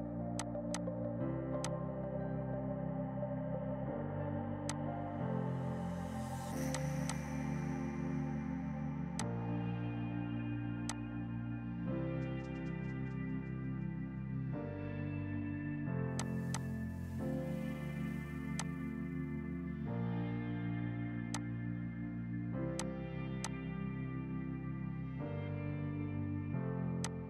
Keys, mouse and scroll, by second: 9.1 F2, 9.3 click, 16.2 click, 16.6 shift+click, 17.0 F3, 18.6 click, 19.9 F4, 21.2 F2, 21.4 click, 22.9 alt+click, 27.1 alt+click, 27.1 typing.